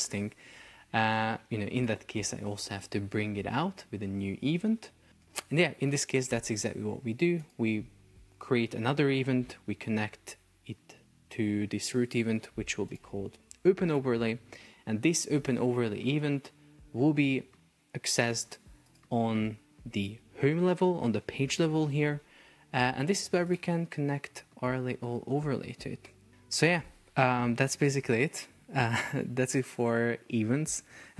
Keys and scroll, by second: 25.7 Escape.